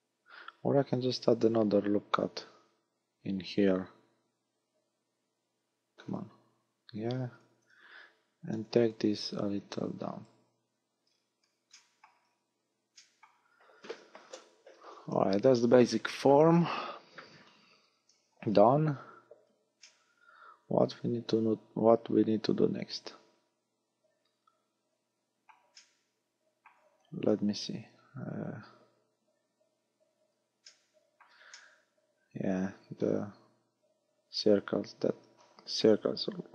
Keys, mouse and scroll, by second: 1.1 ctrl+r, 7.5 click, 7.8 a, 8.6 b, 9.7 click, 10.8 a, 11.1-11.5 scroll down 4, 11.8 shift+middle click, 12.2 scroll down 2, 13.0 shift+middle click, 13.8-14.8 scroll up 6, 17.9 scroll down 4, 19.9 middle click, 25.8 middle click, 27.3 KP_1, 28.2 scroll up 5, 29.9-30.7 scroll up 2, 30.7 shift+middle click, 31.6 middle click, 35.1 KP_1.